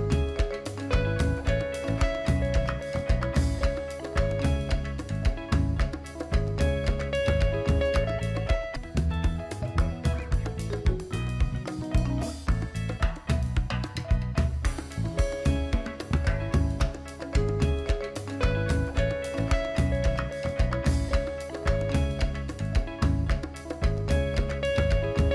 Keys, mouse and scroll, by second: 23.7 click, 24.6-25.1 alt+scroll down 1.